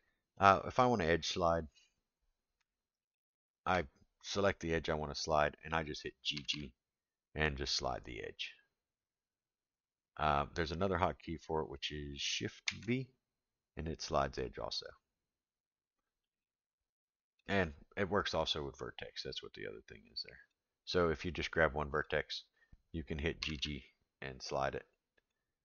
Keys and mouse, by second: 0.3-0.8 middle drag, 3.1 alt+click, 6.3 g, 12.6 shift+v, 16.9 click, 19.4 click, 21.9 click, 23.4 g.